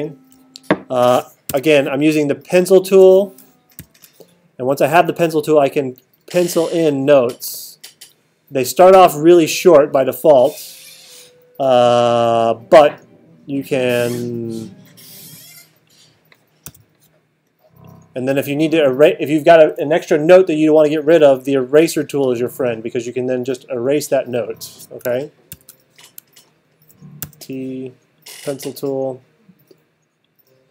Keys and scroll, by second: 1.5 t, 3.8 alt+super+8, 16.7 t, 25.5 alt+super+8, 27.2 t.